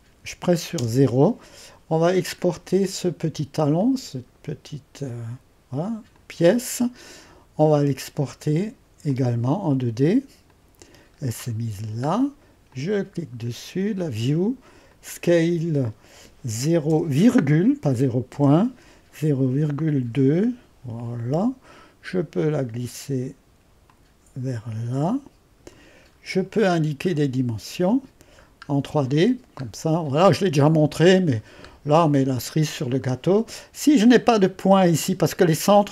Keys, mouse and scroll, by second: 0.8 0, 3.6-5.7 drag, 6.2-11.1 drag, 11.1-12.8 middle drag, 11.1-12.8 scroll down 1, 12.8-16.9 drag, 12.8 typing, 16.9 typing, 18.3 typing, 20.0 typing, 20.4 Return, 23.9-25.7 drag, 26.1 click, 26.1-27.9 scroll up 1, 27.9 click, 28.5 scroll up 1, 29.0 middle click, 29.9-30.4 scroll up 1, 30.4 middle click, 31.1-32.4 scroll up 1, 32.4-35.9 middle drag.